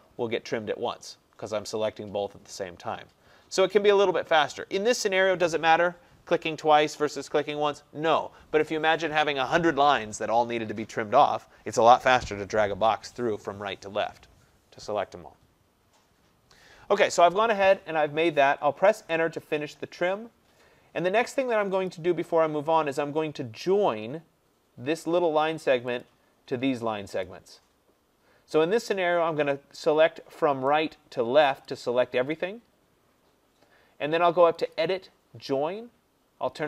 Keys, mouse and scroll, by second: 19.0 Return, 21.9 click, 26.1 click, 27.3 click, 31.7 click, 34.8 click.